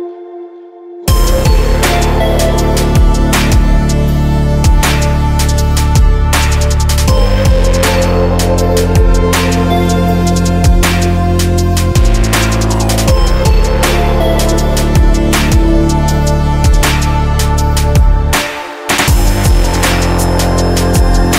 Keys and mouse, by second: 0.1 click, 0.9 click, 3.0 click, 3.2 click, 6.7-10.8 drag, 11.9 click, 12.8 click, 13.8 click, 15.4 click, 19.1 right click, 20.2 middle click.